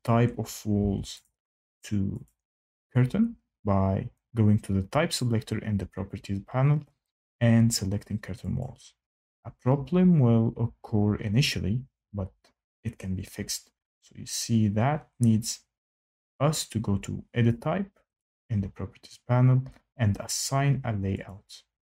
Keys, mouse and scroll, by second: 0.7 Tab, 1.2 click, 2.2 click, 3.0 scroll, 8.5 click, 18.1 click, 21.2 click.